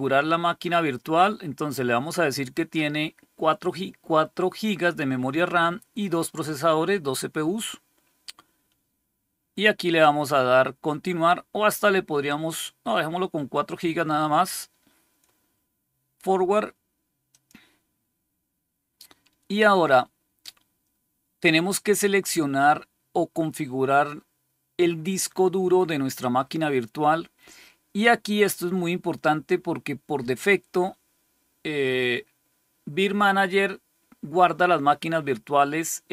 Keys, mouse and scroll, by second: 17.2 click.